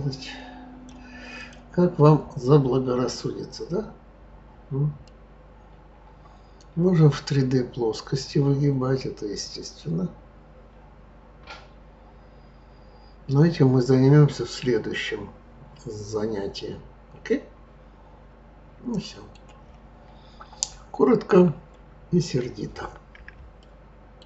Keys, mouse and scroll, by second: 1.4 click, 2.2-2.8 scroll down 6, 3.6 scroll down 2, 4.5 scroll up 3, 5.0-8.0 middle drag, 21.6-23.6 scroll up 6, 23.6 shift+middle click.